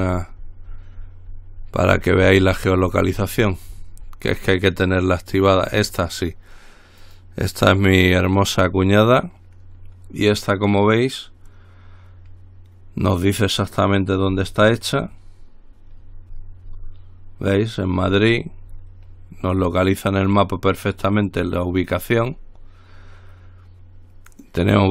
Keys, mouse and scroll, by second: 5.9-6.5 scroll up 2, 7.2 click, 14.6-15.2 scroll up 2, 16.2-17.5 scroll down 3, 18.1-19.6 scroll up 2, 19.8-21.1 drag, 21.7-22.2 scroll down 1, 22.5-23.2 scroll up 1, 24.6 click.